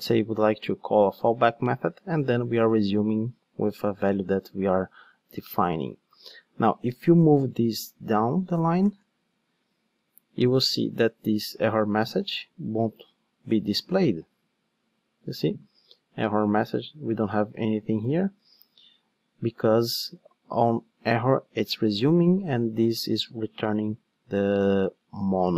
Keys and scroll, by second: 8.5 alt+shift+Down, 10.5 ctrl+shift+d, 16.6 super+c, 17.5 super+v, 20.9 Escape.